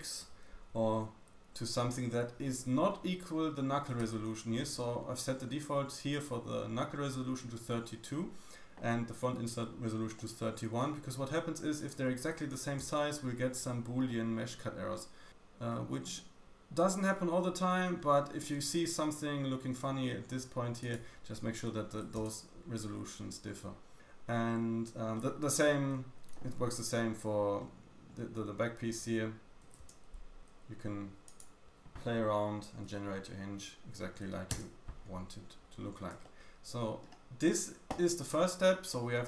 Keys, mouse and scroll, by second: 10.1 middle click, 11.7 click, 14.0 middle click, 15.6 middle click, 16.1-16.4 scroll up 1, 16.4 shift+middle click, 20.7 click, 23.4-23.7 scroll down 1, 25.1 middle click, 27.5 middle click, 29.5 click, 31.2 click, 35.5-36.2 scroll down 3, 36.2 middle click, 37.4-38.1 scroll up 1, 38.1-38.8 scroll down 3, 38.8 middle drag.